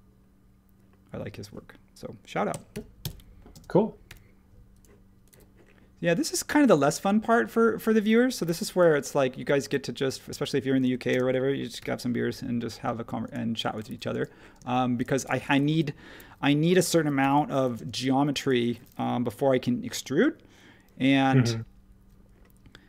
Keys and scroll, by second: 2.2-4.1 typing, 7.8 space, 8.4 h, 9.6 e, 10.8 super+z, 11.8 l, 13.9 e, 14.5 space, 16.7-17.7 typing, 21.0 m.